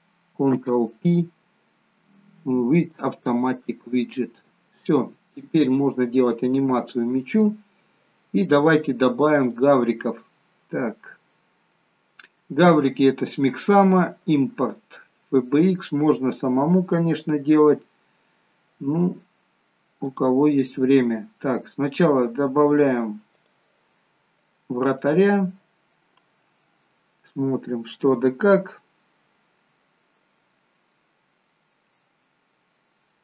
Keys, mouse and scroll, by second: 0.9 ctrl+p, 4.8-5.6 scroll down 5, 5.7 middle click, 6.8-7.5 scroll down 2, 7.5 middle click, 9.6 click.